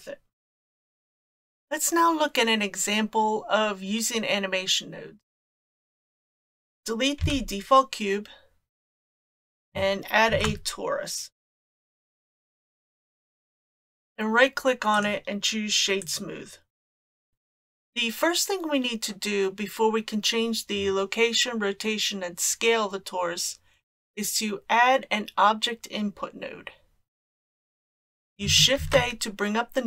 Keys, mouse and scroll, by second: 6.0 click, 7.2 x, 10.3 shift+a, 14.9 right click, 17.3 click, 17.3 x, 27.9 shift+a, 28.8 shift+a.